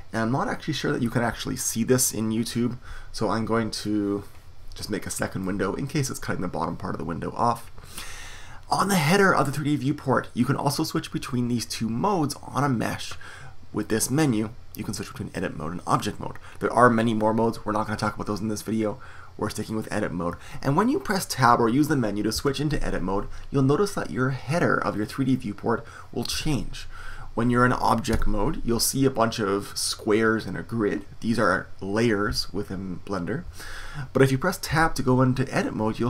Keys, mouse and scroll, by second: 3.8 click, 4.1-19.8 drag, 22.3 Tab, 26.3 Tab, 28.1 Tab, 34.7 Tab.